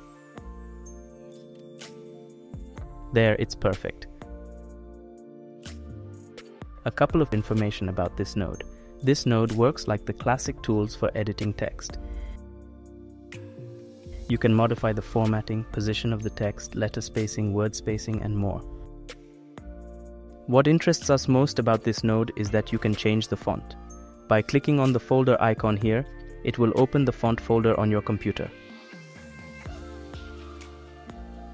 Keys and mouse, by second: 3.7-5.8 middle drag, 6.1 middle click, 8.8-9.9 drag, 11.4 click, 12.8 click, 15.6 click, 16.7 ctrl+z, 17.3 click, 17.9 ctrl+z, 18.3-19.8 drag, 19.8 ctrl+z, 20.3 click, 21.0 ctrl+z, 21.3 click, 23.2 click, 29.0 click.